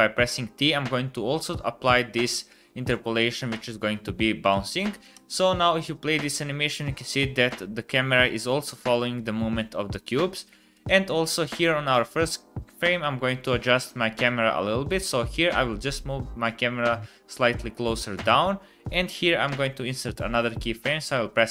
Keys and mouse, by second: 5.1 space, 10.2 space, 10.7 click, 15.0-17.3 middle drag, 18.2-21.5 middle drag, 19.4 i.